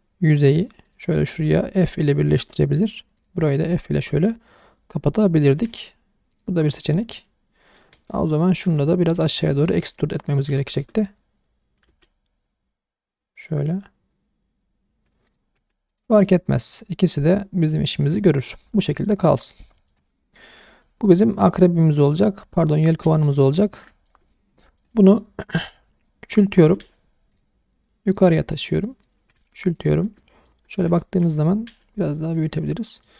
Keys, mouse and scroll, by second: 0.4 click, 0.8 shift+click, 1.3 f, 2.0 middle click, 2.7 2, 3.2 click, 3.6 f, 4.1 scroll down 2, 4.3 middle click, 5.4 shift+middle click, 5.8-6.3 scroll up 1, 6.3 click, 6.9 f, 7.9 3, 8.1 click, 9.1 middle click, 9.5 ctrl+middle click, 9.9 shift+middle click, 10.5 e, 10.7 z, 11.9 z, 15.3 click, 15.6 Tab, 15.9 click, 16.1 scroll down 1, 16.3-19.0 middle drag, 19.3 click, 19.6 scroll down 1, 19.7 shift+middle click, 20.8 r, 22.0 click, 22.0 right click, 23.0 /, 23.7 middle click, 24.2-24.5 scroll up 2, 24.6 shift+middle click, 24.9 middle drag, 25.4 middle drag, 26.8 s, 27.3 click, 28.1 click, 29.3 s, 29.8 click, 30.0-30.5 middle drag, 30.6-31.0 scroll up 3, 31.0 shift+middle drag, 31.7 s, 32.3 click, 32.7-33.1 middle drag.